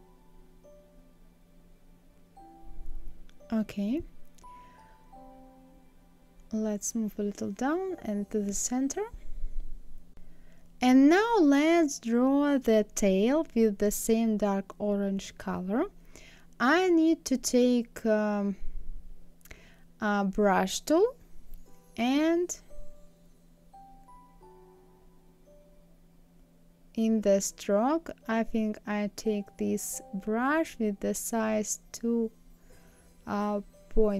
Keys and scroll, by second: 5.6 Down, 6.2 Left, 29.9 KP_2, 30.2 KP_Decimal, 30.5 KP_5, 31.1 Return.